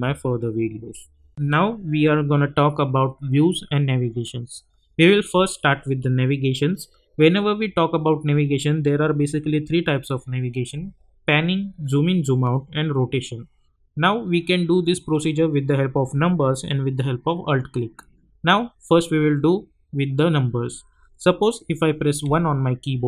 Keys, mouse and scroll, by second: 1.3 click, 22.2-23.0 typing.